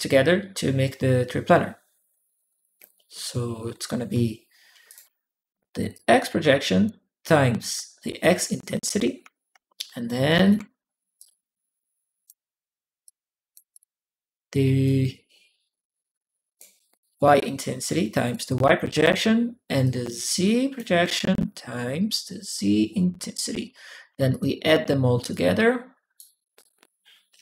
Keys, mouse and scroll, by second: 4.5 m, 4.7 click, 4.7 m, 4.8 m, 5.7 click, 7.0 click, 9.7 ctrl+click, 9.8 m, 9.9 m, 10.2 click, 11.0-12.1 drag, 12.8 click, 13.5 click, 14.6-16.4 drag, 17.2 click, 19.6 click, 21.8-22.8 drag, 23.9 a, 24.1 click, 24.1 a, 25.1 click, 26.3 click.